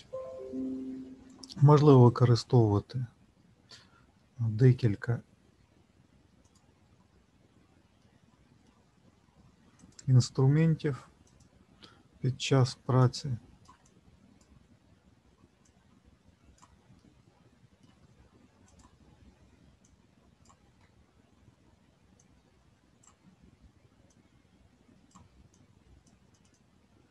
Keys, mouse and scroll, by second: 1.6-2.0 scroll down 1, 4.2 middle click, 4.2-4.6 scroll down 1, 8.0 middle click, 9.8 click, 13.8 click, 14.4 shift+click, 15.6 click, 16.9 middle click, 18.6 click, 21.0 ctrl+z, 22.2 click, 24.0 click.